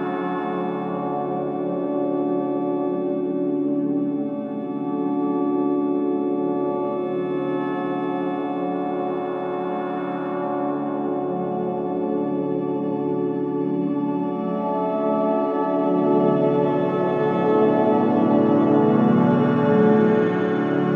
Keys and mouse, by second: 1.0-3.3 typing, 3.7 Return, 4.4 click, 5.0 space, 7.5 typing, 8.3 ctrl+s, 11.2-12.2 drag, 11.7 space, 14.2 space, 14.8-15.8 drag, 15.3 space, 18.1 space, 19.3 ctrl+s.